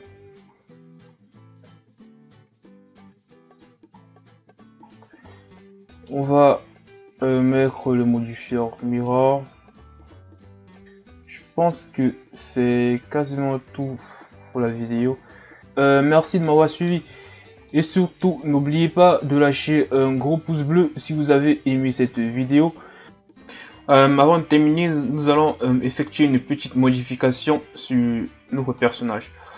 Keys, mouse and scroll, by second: 0.3 a, 0.5 scroll down 1, 1.6 KP_1, 2.9-3.9 scroll up 5, 3.9-4.7 scroll down 5, 4.9-5.3 ctrl+scroll down 1, 5.3-6.0 scroll up 1, 6.0 right click, 6.6-7.3 ctrl+scroll up 3, 9.1 click, 9.6 a, 10.0-10.8 scroll down 4, 13.5-13.9 scroll down 5, 14.5-15.2 shift+scroll down 2, 15.2-15.6 shift+scroll up 1, 15.6-17.3 middle drag, 17.3-17.7 shift+scroll down 3, 17.7-19.2 middle drag, 19.2-19.6 shift+scroll up 5, 19.6-21.3 middle drag, 21.3-23.0 drag, 26.4-27.1 scroll down 2, 27.1-28.8 scroll up 8, 28.8 right click, 29.2-29.5 scroll down 1.